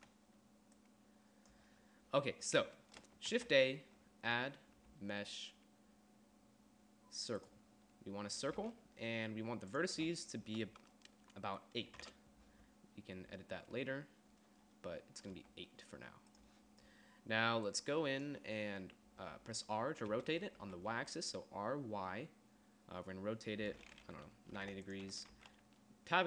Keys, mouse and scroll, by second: 0.2 d, 0.9 d, 3.5 shift+a, 9.9-12.0 drag, 12.2 KP_3, 15.6 g, 20.3 r, 23.5 r, 25.6 Tab.